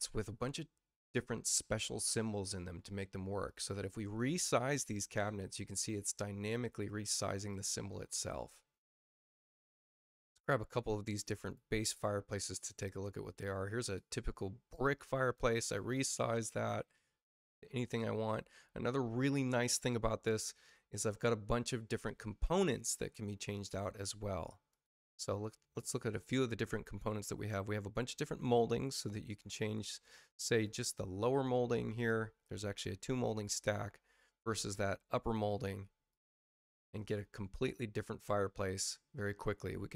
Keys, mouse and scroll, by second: 0.1 click, 3.4 click, 5.8 click, 7.4 click, 9.9 click, 11.3 click, 12.3 click, 13.3 space, 13.8 click, 14.6 click, 17.4 click, 22.5 click, 23.4 click, 24.6 click, 25.7 click, 26.8 click, 29.0 click, 30.4 click, 31.2 click, 35.1 click, 36.0 click.